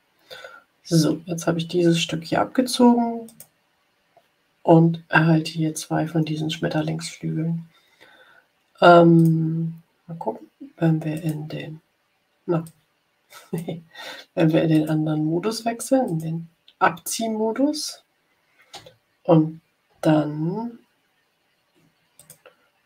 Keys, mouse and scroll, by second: 3.2 click, 9.1 click, 11.1 click, 12.5-13.7 drag, 14.6 click, 16.0 click, 22.1 click.